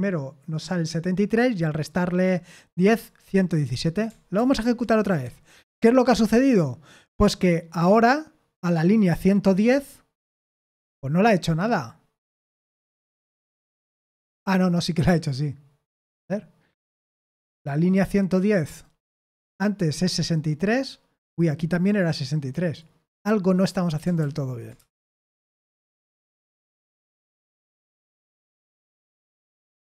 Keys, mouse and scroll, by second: 4.3 ctrl+p, 5.0 Return, 24.2 ctrl+p, 24.7 Return, 29.7 ctrl+p.